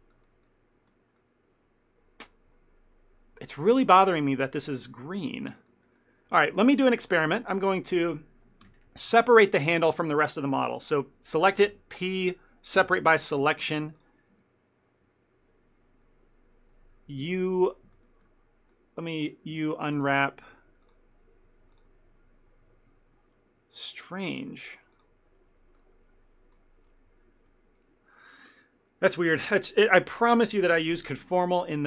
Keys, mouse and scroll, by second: 3.9 shift+middle click, 5.7 ctrl+middle click, 5.9 middle click, 6.6 shift+middle click, 6.9 ctrl+middle click, 7.1 middle click, 8.0 click, 8.7 ctrl+l, 9.6 ctrl+middle click, 11.7 p, 13.7 Tab, 14.1 click, 14.4 Tab, 15.1 a, 17.3 u, 18.0 ctrl+middle click, 19.5 u, 20.2 u, 21.0 click, 24.4 click, 25.8 shift+middle click, 27.0 scroll up 2, 27.5 scroll up 1, 27.6 scroll down 1, 28.2-28.9 scroll down 1.